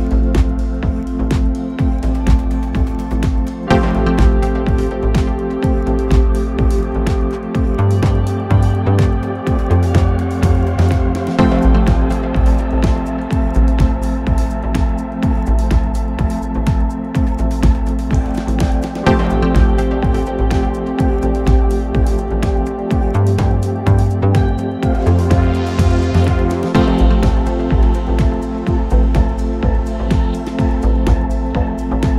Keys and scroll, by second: 8.0 1, 12.8 ctrl+z, 15.7 ctrl+F1, 16.1 ctrl+F2, 24.1 0, 25.1 1, 25.4 Return, 30.8 shift+r, 31.2 shift+t, 31.5 Return.